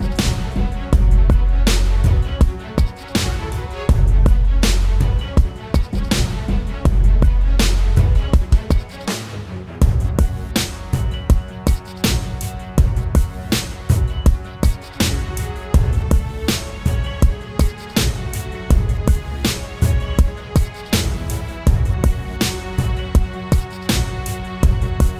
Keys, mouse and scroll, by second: 1.8-5.2 typing, 10.2-10.6 typing, 24.9-25.1 scroll up 1.